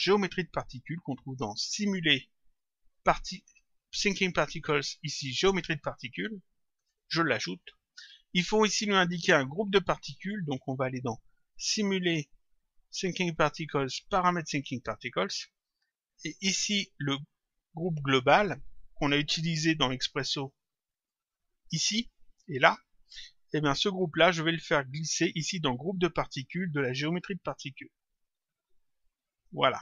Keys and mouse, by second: 1.6 click, 6.7 click, 11.4 click, 14.7 click, 16.0 click, 20.4 click, 23.4 click, 28.1 click.